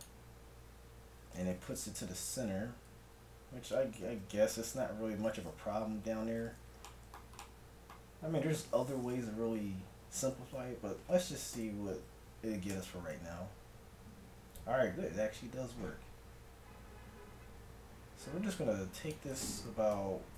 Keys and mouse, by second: 4.1 z, 4.6 middle click, 6.1 n, 9.3 middle click, 11.6 r, 19.7 KP_1, 20.0 KP_7.